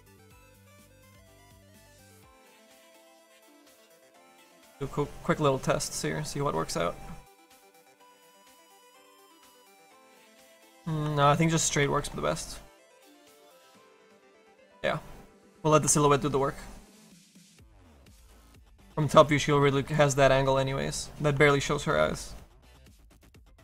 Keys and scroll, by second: 6.2 ], 11.9 ctrl+z.